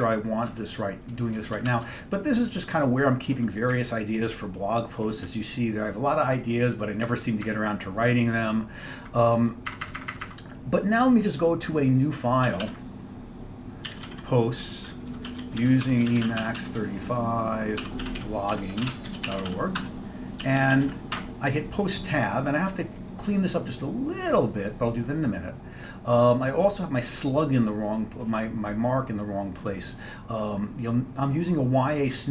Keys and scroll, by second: 0.5 Tab, 1.5 Down, 1.6 Down, 1.8 Down, 1.9-3.5 Down, 3.8-5.1 Up, 5.3 Down, 5.8 Down, 5.9 Down, 6.0 Down, 6.2-7.5 Down, 7.5 Up, 8.0 Up, 8.1 Up, 8.2 Up, 8.4 Up, 8.5 Up, 9.9 Up, 10.0 Up, 10.1 Up, 10.3 Up, 12.5 ctrl+x, 12.7 ctrl+f, 13.7-21.4 typing.